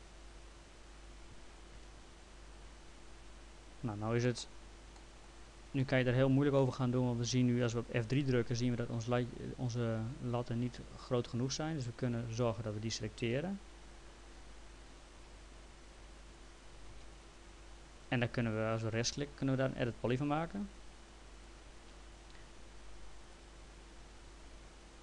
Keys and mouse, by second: 1.7 F3, 4.3 middle click, 5.8 middle click, 6.7 middle click, 8.2 F3, 12.3 click, 16.4 ctrl+click, 16.9 ctrl+z, 17.2 ctrl+click, 19.1 right click, 21.4 click, 23.2 click, 24.2 ctrl+z.